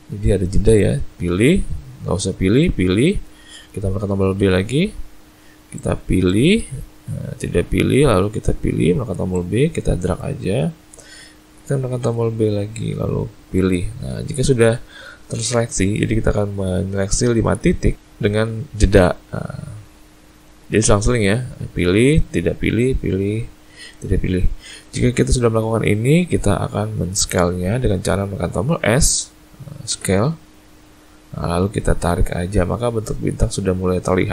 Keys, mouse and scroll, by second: 4.4 b, 8.3 b, 12.0 b, 29.9 s.